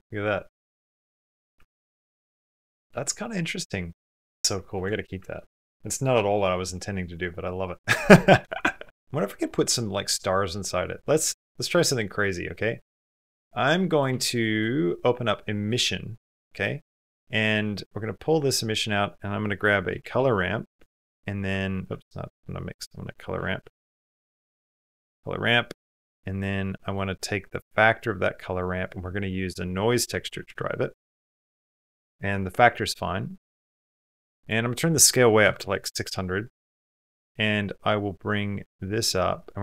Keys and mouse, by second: 1.0 shift+middle click, 1.3 ctrl+middle click, 1.7 shift+middle click, 2.1 ctrl+middle click, 4.6 shift+middle click, 5.0 ctrl+middle click, 5.9 shift+middle click, 6.3 middle click, 11.6 click, 12.4 middle click, 13.0 middle click, 13.7 click, 13.9 g, 14.7 middle click, 18.5-20.6 drag, 21.7 x, 35.5 KP_0, 37.0 click, 38.2 click, 39.2 click.